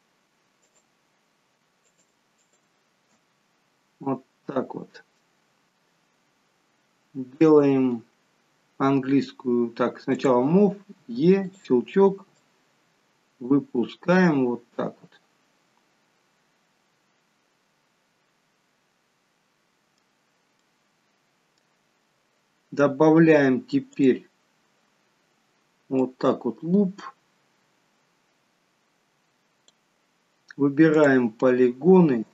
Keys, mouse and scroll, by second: 0.7 click, 1.9 alt+shift+click, 4.1 middle click, 10.2 click, 11.0 e, 12.4 click, 13.8 middle click, 20.6 middle click, 24.0 click, 26.0 click, 31.0 click.